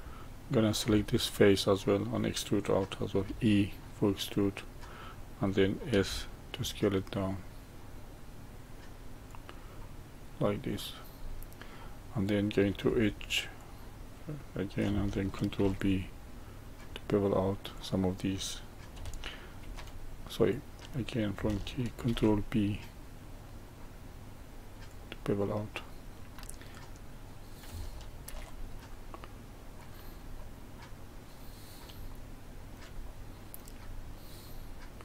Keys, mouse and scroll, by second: 0.8 3, 1.2 click, 3.2 e, 5.8 s, 9.7-12.8 middle drag, 12.8 2, 13.5 click, 15.5 ctrl+b, 17.7 click, 19.6 ctrl+v, 22.0 ctrl+b, 25.7-26.7 middle drag, 26.7 click, 28.2 ctrl+b, 30.3-33.8 middle drag, 33.8-34.4 scroll up 1, 34.4-35.0 middle drag.